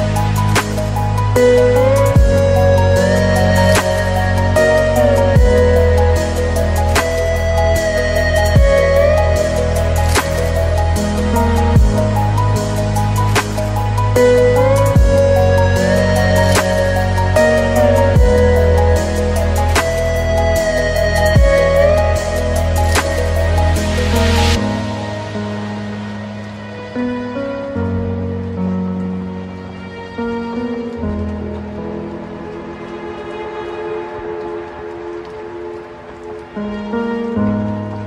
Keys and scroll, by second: 29.9 ctrl+space.